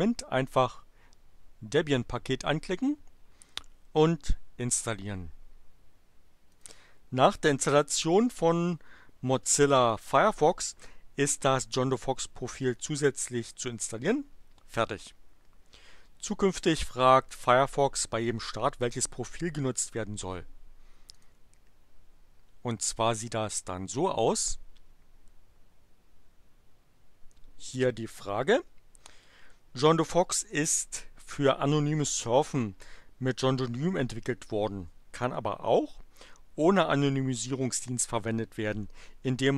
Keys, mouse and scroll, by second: 0.4 click, 6.5 click, 21.1 click, 24.0 click.